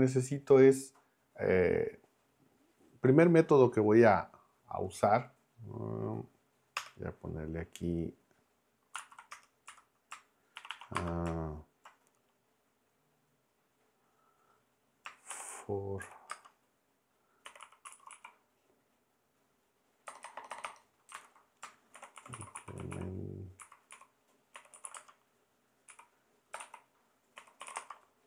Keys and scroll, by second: 6.8 Return, 9.0 super+Left, 9.3 Return, 9.7 Up, 10.6 shift+3, 10.9 space, 15.1-18.6 typing, 20.1 BackSpace, 21.1 alt+Left, 21.9-28.2 typing.